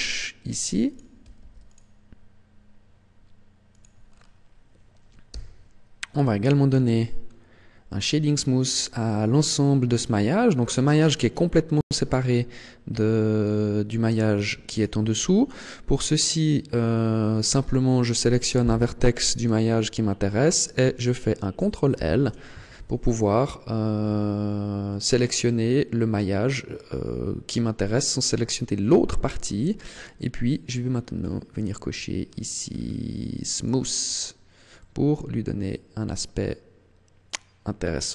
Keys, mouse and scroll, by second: 1.0 click, 1.4 ctrl+r, 3.7 click, 4.0-5.2 scroll down 4, 5.2 t, 6.8-7.2 scroll up 6, 8.2-8.8 scroll down 3, 8.7-9.1 scroll up 3, 9.3 scroll down 2, 10.4-10.8 scroll down 2, 11.6 right click, 13.2 right click, 14.5 right click, 15.8 scroll up 1, 21.8 ctrl+l, 30.7-32.1 scroll down 5, 32.1-33.4 scroll down 5, 33.4 click, 34.6 middle click.